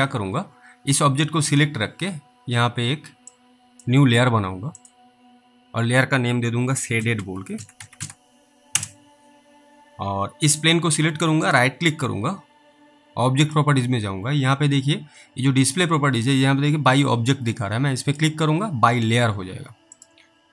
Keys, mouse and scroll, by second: 3.6 click, 4.8 click, 6.5-8.7 typing, 8.7 Return, 10.6 click, 11.5 right click, 13.5 click, 18.1 click.